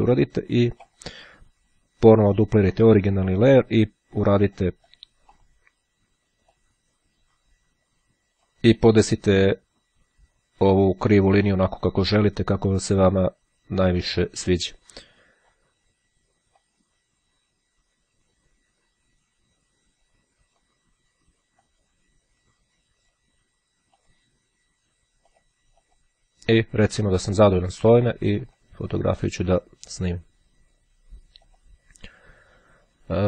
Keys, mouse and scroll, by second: 2.9 click, 4.5-5.6 drag, 6.7-9.1 drag, 9.5-11.7 drag, 14.1-16.1 drag, 16.7-21.1 drag, 21.5-23.7 drag, 24.0 click, 25.3 click, 28.5 click, 30.8-32.2 drag.